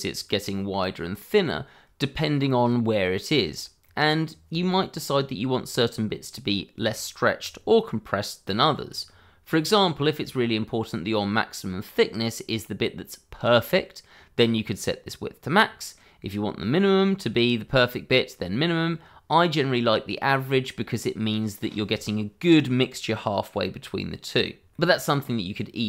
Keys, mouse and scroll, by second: 1.3-2.1 scroll up 1, 3.3-3.8 scroll down 1, 3.8 middle click, 9.2-9.6 scroll up 1, 9.6 middle click, 15.6 middle click, 20.2 middle click, 24.7 middle click, 25.5-25.8 scroll down 1.